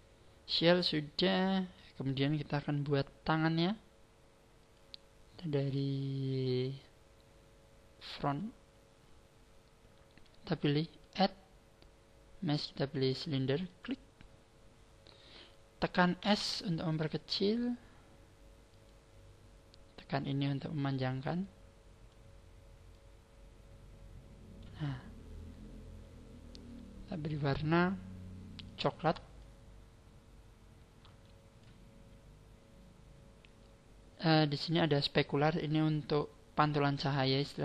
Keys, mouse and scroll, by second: 4.5 click, 11.0 click, 13.8 click, 16.2 s, 18.8 click, 20.2 click, 22.1 click, 22.9 click, 25.4-25.8 scroll up 4, 27.2 click, 28.6 click, 33.0-36.3 scroll down 2, 33.4-36.3 scroll up 1, 36.3 scroll up 1, 37.5 click.